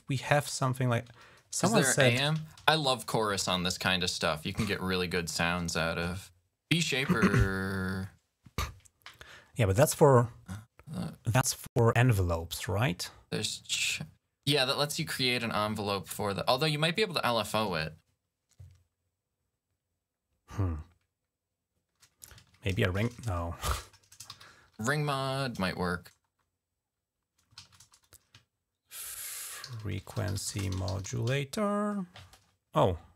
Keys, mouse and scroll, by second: 0.8 ctrl+a, 1.9-3.8 typing, 22.0 click, 22.2 ctrl+click, 22.2 ctrl+a, 23.9-25.0 typing, 27.5 ctrl+a, 27.6 BackSpace, 28.9-31.6 typing, 33.1 click.